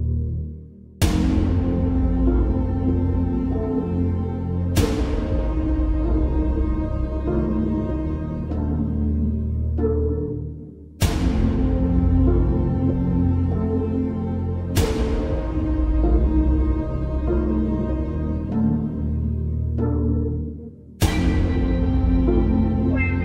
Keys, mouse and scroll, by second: 0.4 click, 2.0 alt+scroll down 1, 2.3 space, 2.4-3.0 click, 2.8 space, 3.2 alt+scroll down 1, 3.6 space, 3.7 click, 4.3 alt+scroll up 1, 4.7 space, 4.8-5.4 click, 5.2 space, 7.8 space, 8.0-8.4 click, 8.3 space.